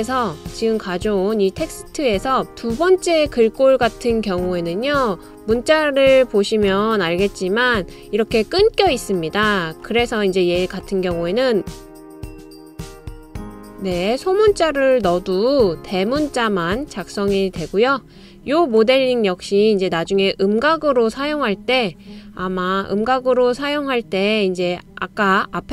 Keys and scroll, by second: 12.2-14.1 typing.